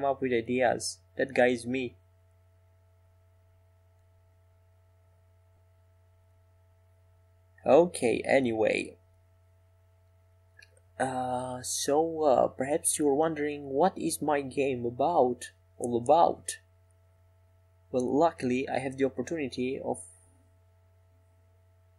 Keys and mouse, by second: 1.3-2.5 middle drag, 7.8 x, 11.1 ctrl+z, 15.9-17.3 middle drag.